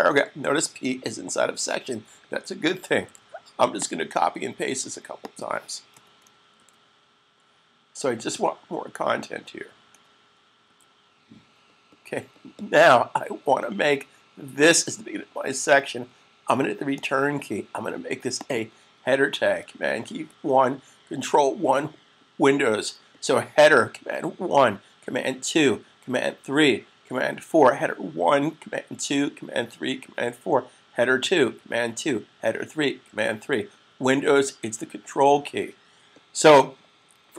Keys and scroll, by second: 3.8 c, 7.1 v, 11.3 v, 20.0 1.